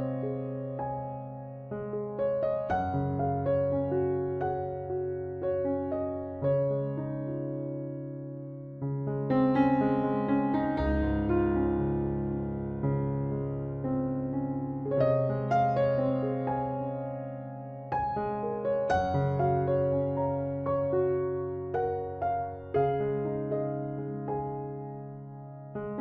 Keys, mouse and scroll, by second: 0.9-2.6 drag, 2.8-5.3 middle drag, 3.7 c, 5.9-7.7 drag, 7.0 c, 9.2-10.9 drag, 9.9 c, 10.5 right click, 11.1-13.3 drag, 11.6 right click, 13.0 c, 15.3-16.5 drag, 16.8 KP_3, 17.1 Tab, 17.7 z, 18.9 Tab, 19.2-21.0 drag, 19.7 ctrl+r, 21.1 ctrl+r, 22.1 ctrl+Tab, 22.8 z, 23.0 middle click, 25.2 z, 25.8 z.